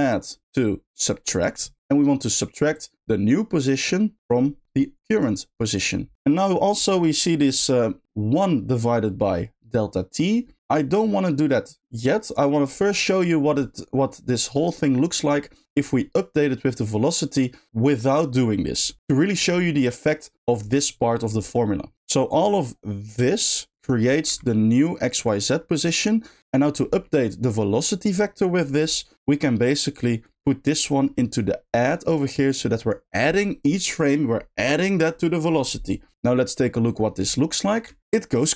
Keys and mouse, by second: 1.7 click, 2.7-3.9 drag, 4.3-5.2 drag, 5.7 click, 7.4 middle click, 12.8 middle click, 19.0 middle drag, 19.4 middle click, 21.9 ctrl+z, 21.9 g, 22.2 click, 22.5-23.1 drag, 23.5 shift+drag, 24.2 g, 25.9 middle click, 26.5 middle click, 27.1 middle click, 28.6 middle click, 29.9-31.7 drag, 32.1 middle click, 32.5 click, 36.8 click, 37.8 space.